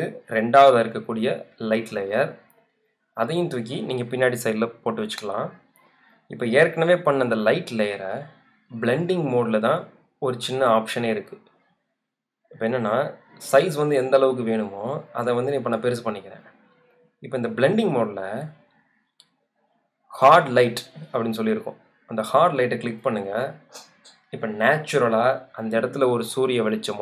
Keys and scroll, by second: 6.2 v, 12.0 super+t, 16.1 alt+shift+Return.